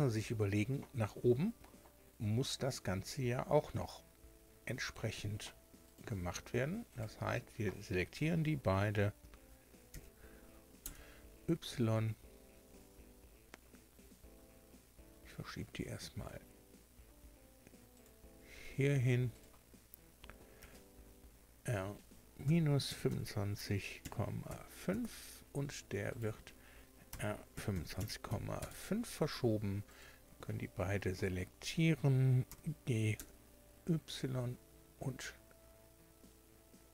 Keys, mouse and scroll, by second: 5.9 right click, 6.9 shift+right click, 9.9 shift+d, 10.8 y, 17.9 click, 19.3 right click, 20.6 r, 22.4 KP_Subtract, 22.9 KP_2, 23.1 KP_5, 24.0 KP_Decimal, 24.5 KP_5, 24.9 KP_Enter, 26.1 right click, 27.1-28.3 typing, 28.6 KP_Enter, 29.9 shift+right click, 32.5 g, 33.1 y.